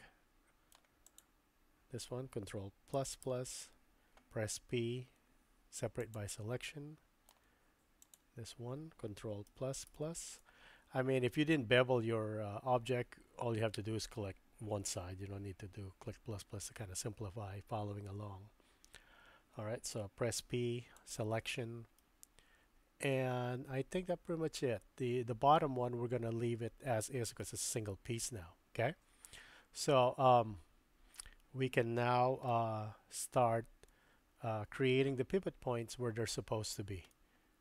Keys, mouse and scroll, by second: 1.1 click, 3.0 ctrl+KP_Add, 3.2 ctrl+KP_Add, 4.9 p, 6.6 click, 8.1 click, 9.5 ctrl+KP_Add, 9.9 ctrl+KP_Add, 20.4 p, 22.0-23.9 drag, 23.9-27.4 middle drag, 27.4 click, 32.5 click, 32.6-36.7 middle drag, 37.1 shift+middle click.